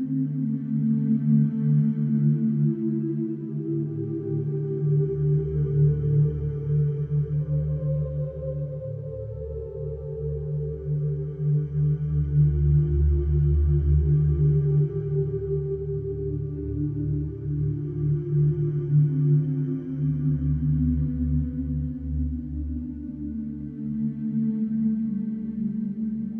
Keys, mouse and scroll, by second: 0.5 click, 3.6 click, 7.3 middle click, 8.6 F4, 9.1 middle click, 10.6 alt+middle click, 11.9 middle click, 12.4 alt+middle click, 15.5 middle click, 16.9 alt+middle click, 19.1 middle click, 21.4 middle click, 24.0 click, 25.0 middle click.